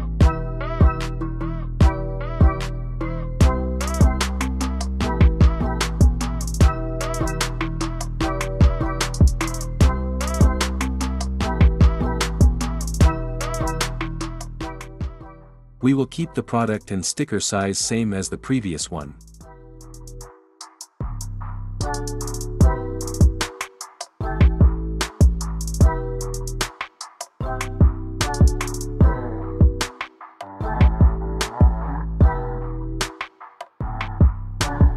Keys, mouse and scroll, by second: 3.7 click, 7.6 click, 13.7 click, 16.3 click, 20.1 click, 21.7 click, 23.2 click, 24.4 click, 25.8 click, 28.5 click, 29.6 click, 33.5 click, 34.8 click.